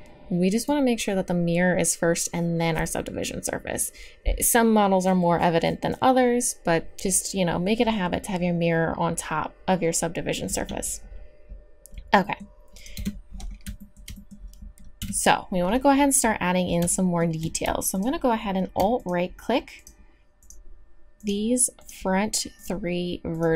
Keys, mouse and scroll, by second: 0.5-2.6 drag, 12.2-13.0 drag, 13.0 Tab, 15.0 KP_3.